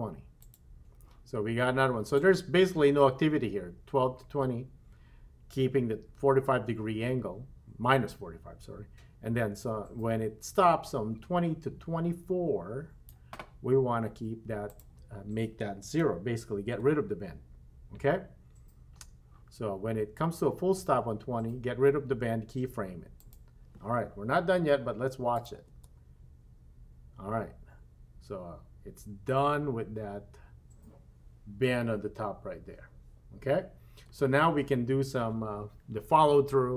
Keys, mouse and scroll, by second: 0.4 click, 2.2-13.1 drag, 14.7-16.8 drag, 23.2 click, 25.4 click, 25.7 space, 34.2 space.